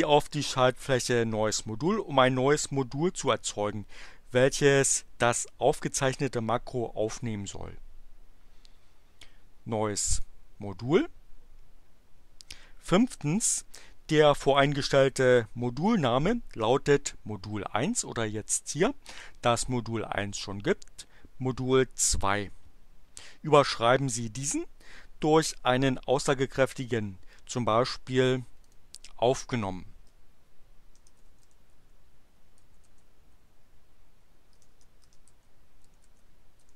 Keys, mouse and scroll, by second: 10.1 click, 28.6 click, 30.0-32.9 typing, 34.6-36.7 typing.